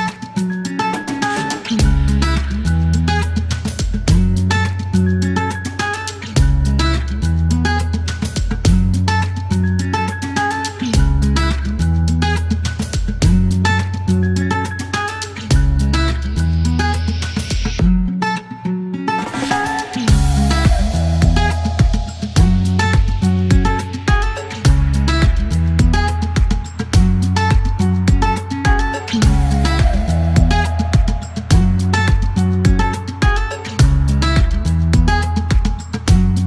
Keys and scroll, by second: 5.2-5.7 typing, 7.4-9.5 typing, 10.5 alt+q, 14.2 typing, 15.7-16.5 typing, 18.5 typing, 22.3 ctrl+z, 26.6 e, 32.1 typing, 33.6 KP_Decimal, 33.7 KP_1, 34.1 KP_3, 34.2 Return, 34.8 alt+q.